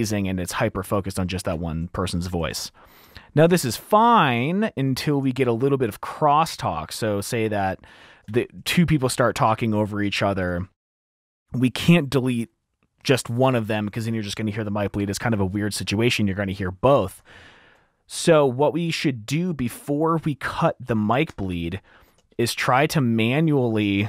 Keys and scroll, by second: 2.8 super+2, 3.1 F2, 6.2 F7, 7.0 super+`, 8.7 super+`, 17.3 F2, 17.4 super+2, 18.0 F2, 21.6 F7, 21.7 t, 21.8 t, 22.6 t, 22.9 F2, 23.0 F2, 23.2 F2.